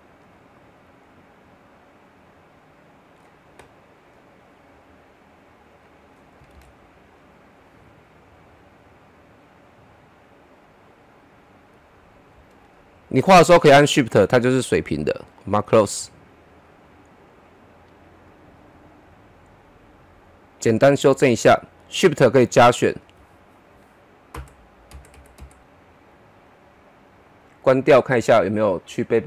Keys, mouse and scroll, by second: 6.5 ctrl+z, 7.1 click, 12.3 shift+Num_Lock, 12.3 click, 12.6 shift+click, 20.2 click, 21.4 shift+click, 24.3 Up, 28.2 click.